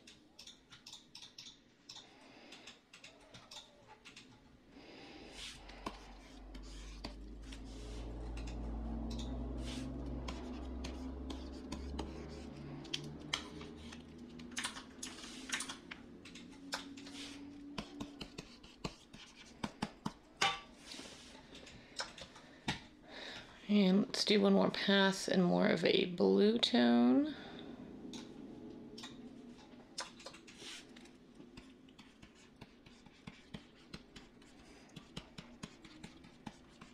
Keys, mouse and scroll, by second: 14.6 ctrl+z, 15.6 ctrl+z.